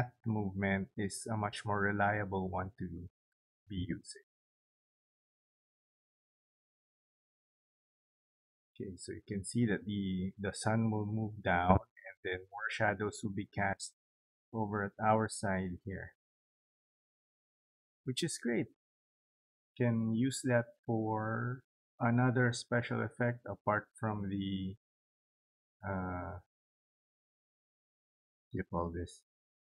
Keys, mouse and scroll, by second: 6.2 click.